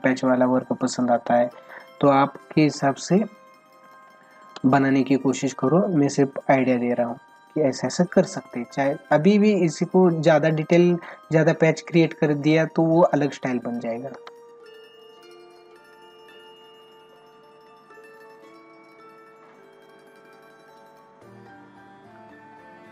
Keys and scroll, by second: 3.9 space, 14.1 ctrl+alt+z.